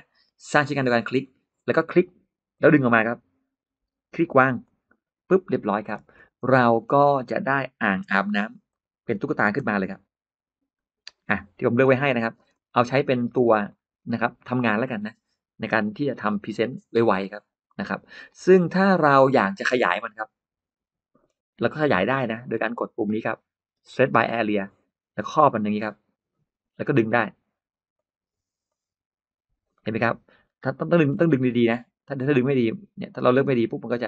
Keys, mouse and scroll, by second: 0.9 click, 2.4 click, 4.5 click, 5.9 space, 6.3 click, 6.3 space, 6.6 scroll up 4, 6.6 middle click, 7.8 m, 8.5 click, 10.9 shift+click, 11.2-12.2 middle drag, 11.2 scroll up 2, 11.9 scroll up 1, 12.1 scroll down 1, 12.2-12.5 scroll up 1, 12.2 space, 12.5 scroll down 1, 12.8 click, 13.1 middle click, 13.5-14.1 scroll up 1, 19.7-21.0 middle drag, 21.1-22.8 scroll down 1, 24.1 click, 25.0-26.5 drag, 27.8 click, 28.5 click, 29.6-30.8 middle drag, 31.0 scroll down 1, 31.2 ctrl+z, 31.2 ctrl+middle click, 31.3-31.6 ctrl+scroll up 1, 32.0-33.5 drag.